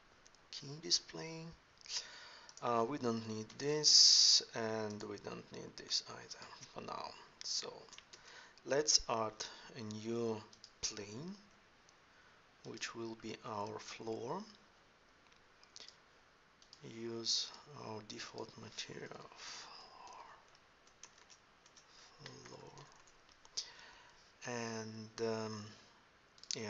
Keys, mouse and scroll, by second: 0.7 n, 3.3 x, 5.7 x, 8.0 shift+a, 11.3 s, 13.1-14.3 middle drag, 20.1 r, 21.0 BackSpace, 22.5 o, 26.2-26.6 middle drag.